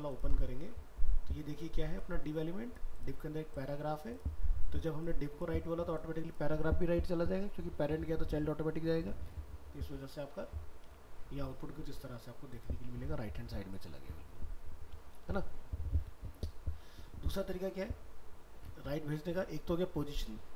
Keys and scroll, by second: 10.8 alt+Tab, 15.2 ctrl+w.